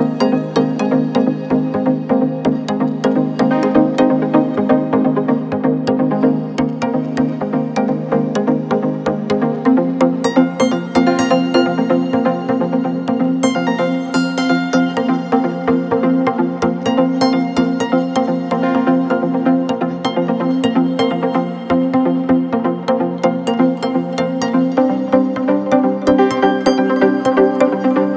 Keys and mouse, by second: 7.8 middle click, 9.1 1, 10.5 middle click, 11.6 middle click, 12.2 shift+middle click, 12.9 shift+middle click, 13.6 ctrl+middle click, 14.9 shift+middle click, 16.7 shift+s, 18.4 click, 19.5 Tab, 20.3 shift+a, 23.6 r.